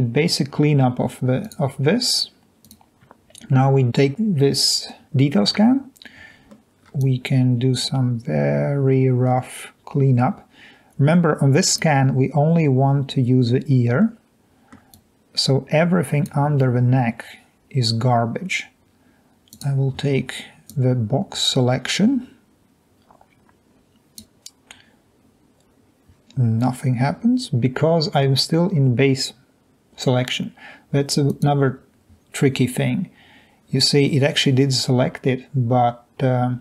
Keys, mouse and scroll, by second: 14.0 middle click, 20.7 drag.